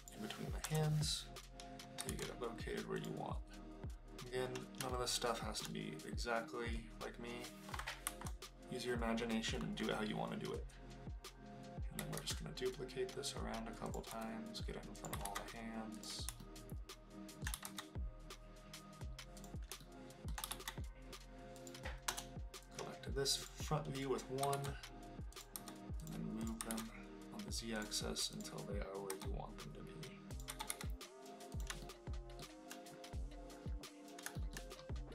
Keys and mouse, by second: 0.0 click, 0.6 KP_0, 2.0 g, 2.3 z, 3.0 click, 4.9-5.6 shift+middle drag, 8.0 KP_7, 12.1 alt+d, 13.8 click, 14.1 s, 14.9 click, 15.2 alt+d, 15.9 click, 16.4-17.5 shift+middle drag, 17.6 alt+d, 19.4 click, 19.8-20.3 shift+middle drag, 20.5 alt+d, 21.6 click, 22.1 KP_0, 24.4 g, 24.5 z, 25.3 click, 25.5 g, 26.0 click, 26.4 click, 26.6 g, 26.7 z, 27.8 click, 29.1 g, 30.3 click, 30.5 g, 30.7 y, 31.5 click, 31.8 shift+middle click, 34.4 shift+middle click.